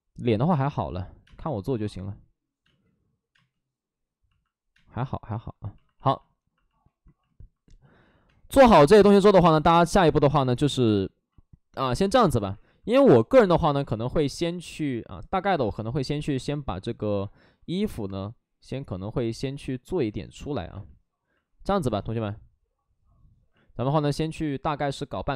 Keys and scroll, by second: 1.2 space, 5.3 space, 8.2 space, 9.3 space, 11.7 space, 12.5 alt+s, 15.7 space, 16.1 space, 20.4 ctrl+z.